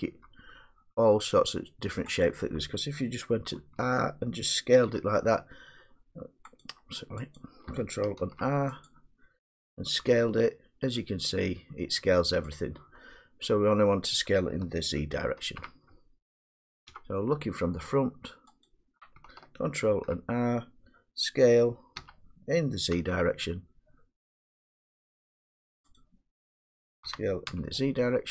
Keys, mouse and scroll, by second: 1.4 middle click, 2.3 click, 3.6 ctrl+r, 4.9 s, 6.6 click, 7.4 click, 8.3 ctrl+r, 8.9 click, 10.1 s, 12.6 click, 13.7 middle click, 15.4 ctrl+z, 16.9 1, 18.7 click, 19.9 ctrl+r, 22.0-23.0 typing, 26.0 click, 27.1 s.